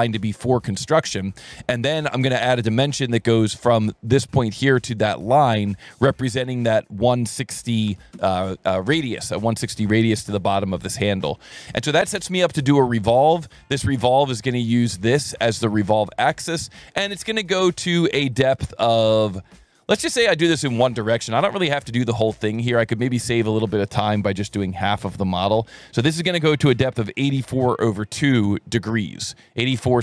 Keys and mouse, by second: 0.5 click, 1.2 Escape, 1.4 Escape, 2.0 s, 3.4 click, 4.7 click, 5.8 click, 6.6 click, 7.6 KP_1, 8.1 KP_Enter, 12.5 click, 14.5 click, 15.3 click, 18.3 click, 19.2 click, 21.1 click, 22.6 click, 26.9 KP_8, 27.1 KP_4, 27.3 KP_Divide, 27.6 KP_2, 28.5 KP_Enter.